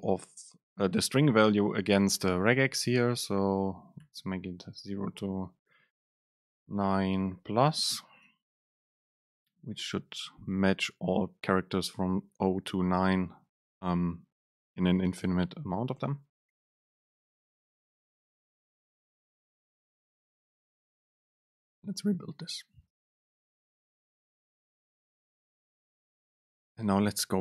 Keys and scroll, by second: 6.6 BackSpace, 8.4 Down, 8.6 Up.